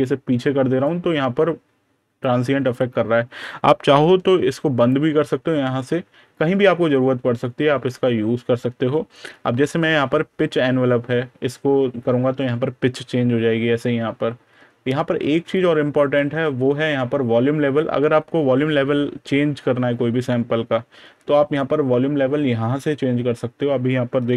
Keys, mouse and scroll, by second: 4.6 click, 15.4 click.